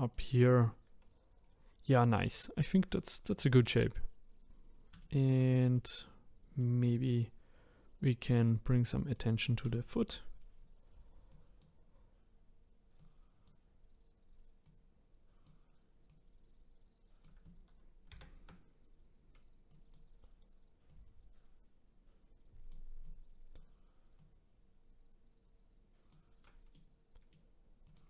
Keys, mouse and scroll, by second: 0.4-1.5 scroll down 3, 1.5-2.5 scroll up 3, 2.5-4.5 scroll down 2, 4.5-5.0 scroll down 1, 5.1 middle click, 5.7-6.6 scroll up 2, 6.6-7.7 middle drag, 7.7-9.0 scroll down 1, 9.0 click, 9.8 middle click, 10.4-11.3 scroll up 1, 11.3 click, 13.0 click, 14.6 click, 16.1 click, 19.7-24.2 drag, 26.7-27.8 middle drag, 27.8 click.